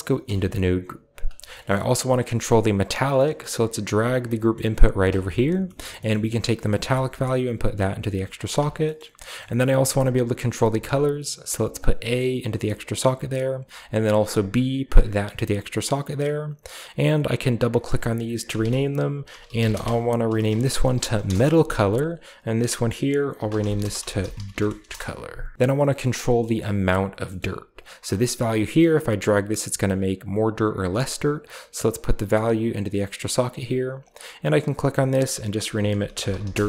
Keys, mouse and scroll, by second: 0.1 Tab, 1.0-1.4 scroll down 2, 1.4 middle drag, 2.5-3.0 drag, 2.8-3.6 scroll down 1, 3.0 middle click, 3.4 g, 3.9 click, 4.6 g, 4.9 click, 5.1-6.8 scroll up 1, 5.7 middle click, 6.1-6.8 middle drag, 6.8-8.2 drag, 8.5 click, 8.7-9.9 middle drag, 9.1 click, 9.5-10.6 scroll up 1, 9.7 g, 9.9 click, 11.7-13.2 drag, 14.3-15.4 drag, 15.9-18.3 drag, 18.5-21.6 typing, 21.7 click, 21.9 click, 23.0-25.3 typing, 25.9 drag, 26.1 middle click, 26.1-27.1 scroll down 2, 26.6 g, 26.8 click, 27.3-28.3 scroll up 1, 28.3-30.7 drag, 30.7 middle click, 31.8-33.6 drag, 33.9 click, 35.8-36.6 typing.